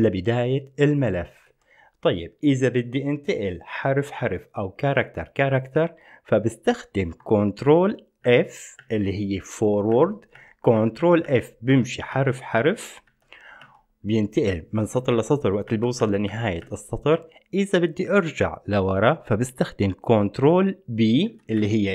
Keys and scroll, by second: 0.5 ctrl+p, 0.7-1.7 ctrl+p, 8.5 ctrl+f, 8.9 ctrl+f, 10.1 ctrl+f, 10.5 ctrl+f, 11.0 ctrl+f, 11.4 ctrl+f, 11.4 ctrl+f, 11.9 ctrl+f, 12.3 ctrl+f, 12.8 ctrl+f, 13.3 ctrl+f, 13.8 ctrl+f, 14.9 ctrl+f, 15.9 ctrl+f, 16.2 ctrl+f, 16.5 ctrl+f, 16.8 ctrl+f, 21.5 ctrl+b, 21.8 ctrl+b.